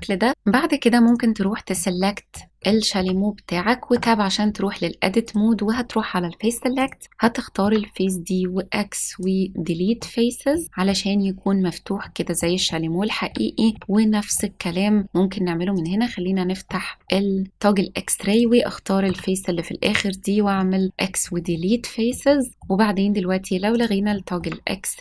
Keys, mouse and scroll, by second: 0.3 click, 1.0 click, 1.7-2.3 middle drag, 2.5 scroll up 2, 2.6-2.9 shift+middle drag, 2.9 shift+scroll down 1, 3.2-3.5 scroll up 1, 3.8 Tab, 5.2 click, 6.7 click, 7.5 x, 9.9 middle click, 10.6 middle click, 12.0 middle click, 12.6 shift+middle click, 13.7 shift+middle click, 14.2 middle click, 14.4 scroll up 1, 14.7 scroll down 1, 15.7 click, 15.7 scroll down 1, 16.6 middle click, 18.2 click, 19.0 x, 20.5 middle click, 20.9 s, 21.0-21.5 scroll down 3, 21.5 middle click, 22.2 scroll up 2, 22.5 middle click, 23.7 click, 24.1 shift+middle click.